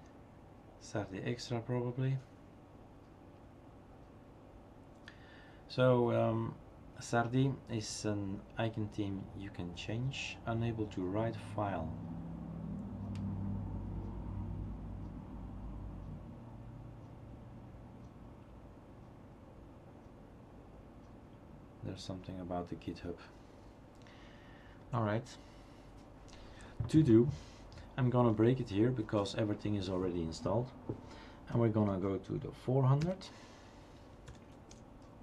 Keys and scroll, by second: 29.0 ctrl+c, 31.9 Up, 33.1 Down, 34.3 ..